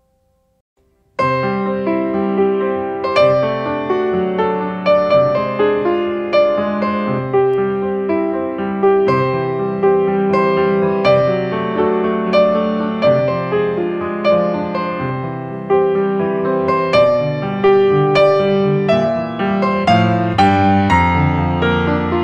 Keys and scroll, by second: 2.0 space, 4.1 ctrl+space, 16.3 ctrl+space, 18.4 ctrl+space.